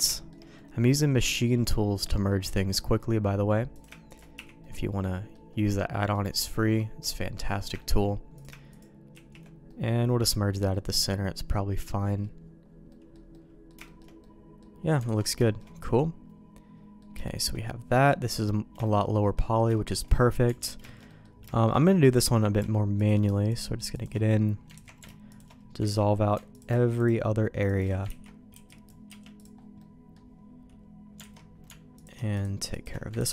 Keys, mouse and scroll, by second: 0.1 shift+middle click, 0.5 middle click, 1.3 middle click, 2.2 middle click, 2.9 middle click, 3.7 click, 4.0 shift+click, 4.3 1, 4.6 middle click, 5.7 middle click, 6.7 middle click, 7.7 shift+middle click, 8.3 click, 8.7 shift+click, 9.1 shift+1, 9.6 middle click, 10.7-12.2 middle drag, 12.8 middle click, 13.3 middle click, 13.8 shift+middle click, 14.2 middle click, 15.0 alt+a, 15.4 middle click, 15.9-16.9 middle drag, 17.2 middle click, 18.0 middle click, 18.8 shift+middle click, 19.2 middle click, 19.7 shift+middle click, 20.1 middle click, 20.4 Tab, 20.8 shift+middle click, 21.0 middle click, 21.4 shift+middle click, 22.9 alt+click, 24.7 ctrl+z, 25.2 alt+shift+click, 25.8 ctrl+x, 26.9 alt+shift+click, 27.6 alt+shift+click, 28.0 ctrl+x, 28.5 b, 29.0 q, 29.7 middle click, 31.1 alt+a, 31.9 alt+click, 33.1 ctrl+x.